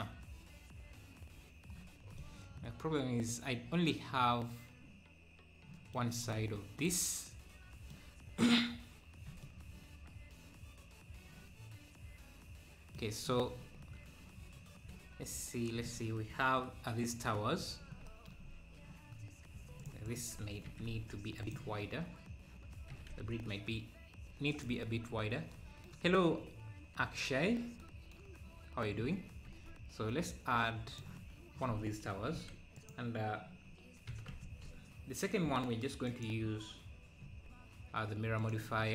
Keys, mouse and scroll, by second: 2.2-6.3 middle drag, 6.3-6.8 scroll down 1, 6.8-13.6 middle drag, 13.6-14.4 scroll down 2, 14.4 `, 15.1 scroll up 1, 15.3 `, 16.3-16.9 scroll down 2, 17.6 KP_7, 18.0 KP_7, 18.4-18.8 scroll up 3, 19.8 click, 20.6 d, 20.9 c, 22.9 s, 25.1-25.5 scroll up 1, 29.5 shift+a, 32.3 g, 37.2 g.